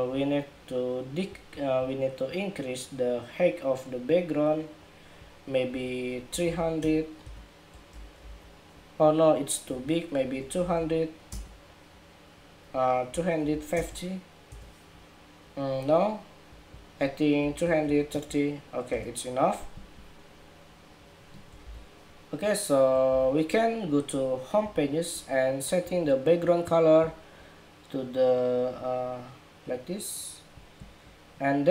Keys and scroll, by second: 7.9 super+-, 21.3 super+=, 22.9 super+-.